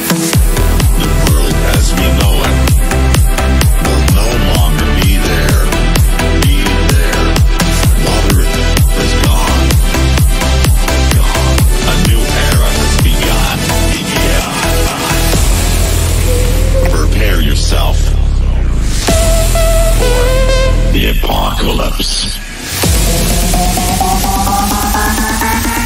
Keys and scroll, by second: 17.1 g.